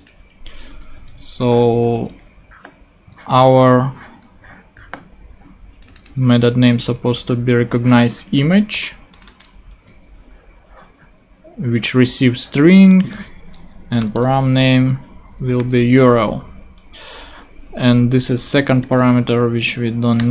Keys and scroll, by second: 0.7 Return, 1.0 super+Tab, 3.1 super+Tab, 6.9 super+c, 7.7 super+Tab, 9.7 super+v, 13.8-15.6 typing, 16.3 Right, 18.0 Left, 18.6 alt+shift+super+Left, 19.1 shift+super+Left, 19.9 shift+Left, 20.2 shift+BackSpace.